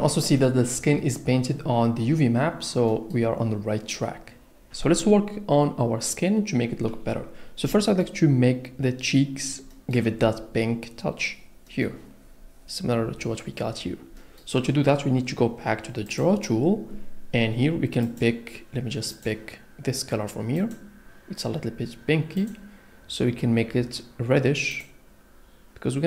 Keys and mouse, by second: 16.1 click, 18.0 click, 20.6 click, 22.4 click.